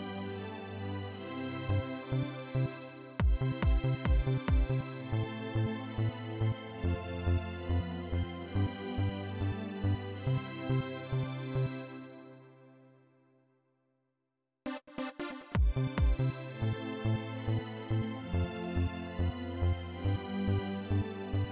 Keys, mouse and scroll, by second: 1.2 click, 1.9 click, 2.9 click, 6.4-9.2 drag, 10.6 click, 13.5-14.5 drag, 15.2 click, 18.1 click, 19.7 click, 21.0 click.